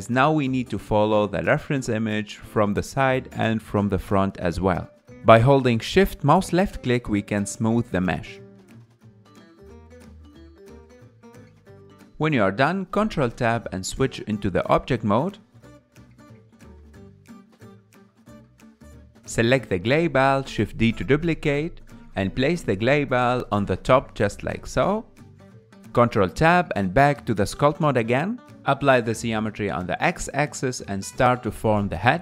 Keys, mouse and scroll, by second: 7.1-7.7 scroll down 3, 7.7-8.8 middle drag, 8.8 shift+click, 9.6-12.1 middle drag, 12.1-13.2 drag, 13.2-14.0 scroll down 3, 16.2 ctrl+Tab, 17.1 ctrl+Tab, 18.2 click, 19.7 shift+d, 23.5 s, 24.0 scroll up 5, 24.4 g, 24.9 s, 25.6 ctrl+Tab, 27.1 ctrl+Tab, 28.1-28.5 scroll down 1, 30.3-31.3 drag, 31.3-32.0 scroll up 1, 32.0 click.